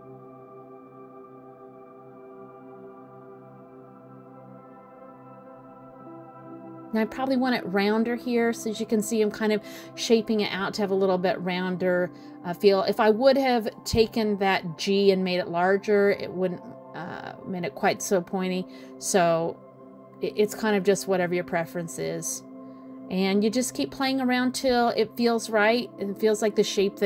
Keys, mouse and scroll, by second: 0.3 click, 0.7 g, 2.0 middle click, 2.8 middle click, 3.6 click, 3.8 g, 5.2 middle click, 6.9 middle click, 8.3 click, 8.4 g, 9.8 middle click, 10.3 middle click, 11.5 click, 11.8 g, 13.1 click, 13.4 g, 14.5 middle click, 15.1 middle click, 16.2 click, 16.5 g, 17.6 middle click, 18.7 middle click, 19.5 click, 19.8 g, 20.7 middle click, 21.6 middle click, 22.5 middle click, 25.0-25.6 scroll down 1.